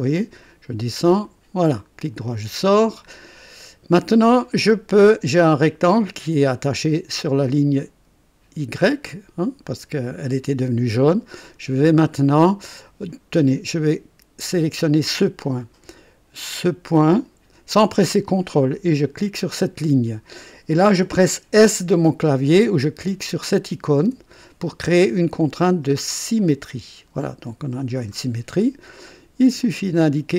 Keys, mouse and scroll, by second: 1.2 click, 2.5 right click, 3.1-3.4 scroll down 1, 3.6 right click, 7.2-9.1 drag, 11.4 click, 12.7 click, 14.8 click, 16.9 click, 19.3 click, 24.0 s, 26.3-28.3 drag, 29.6 click.